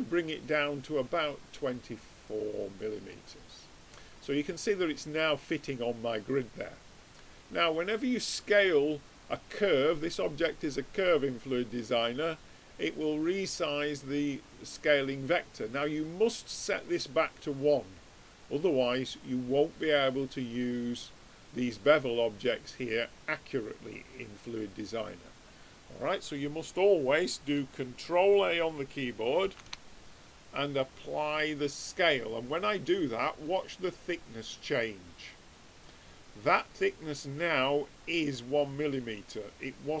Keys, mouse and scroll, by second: 3.3-8.2 middle drag, 8.2-10.1 drag, 19.9-23.5 drag, 29.4 ctrl+a, 35.4-40.0 middle drag.